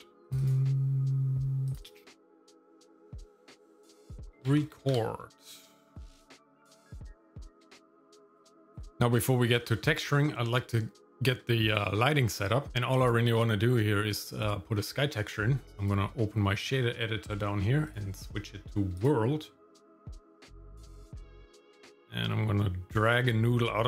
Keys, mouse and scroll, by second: 11.0 shift+middle click, 11.7-12.7 scroll up 1, 14.4 middle click, 15.7 click, 17.9-19.2 drag, 19.7-20.4 scroll up 1, 20.4 KP_Decimal, 21.4 middle click.